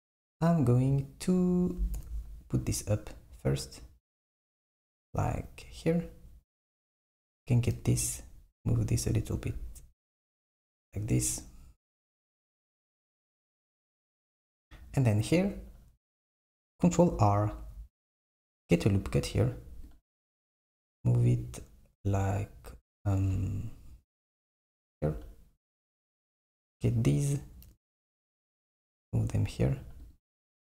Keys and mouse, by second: 2.0 g, 7.0 click, 7.8 g, 11.3 click, 12.0 g, 17.6 r, 26.0 click, 26.9 click, 27.7 g.